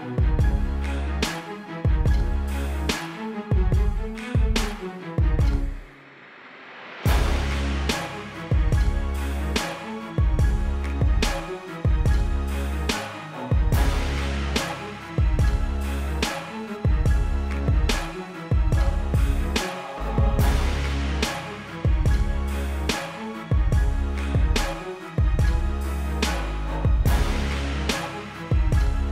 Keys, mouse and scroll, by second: 1.1 =, 1.3 space, 1.4 click, 1.5 space, 3.1 m, 3.6 click, 9.1 alt+BackSpace, 10.1 ctrl+d, 11.1 right click, 14.0 click, 16.7 click, 20.2 ctrl+u, 20.8 click, 24.7 Escape, 25.1 i, 25.6 click, 27.1 click, 27.7 BackSpace.